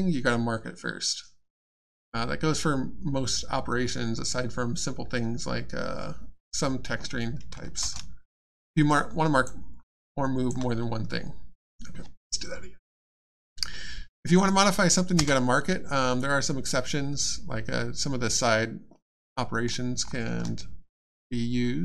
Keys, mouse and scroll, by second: 7.8 shift+space, 8.8 alt+space, 8.9 alt+click, 9.7 alt+scroll up 1, 10.0 alt+click, 19.3 middle click, 20.0-20.4 scroll up 1.